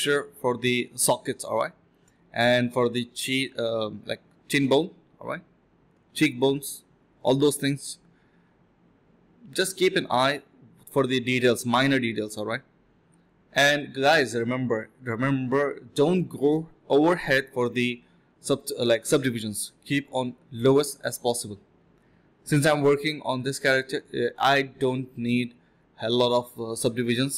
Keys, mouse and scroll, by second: 1.5 typing, 4.3 ctrl+shift+click, 5.4 alt+click, 6.2-6.8 typing, 7.6 alt+click, 7.9 ctrl+b, 8.5 alt+click, 9.1-9.5 typing, 9.8 double click, 12.3 ctrl+b, 12.9 double click, 16.1-16.5 typing, 16.7 double click, 18.7 typing, 19.0 ctrl+shift+click, 19.1 alt+click, 19.3 alt+click, 19.5 ctrl+shift+click, 20.0 ctrl+shift+q, 20.6 f, 20.6 alt+click, 20.8 alt+click, 20.9 alt+click, 23.9 ctrl+b, 24.6 double click, 26.0 alt+click.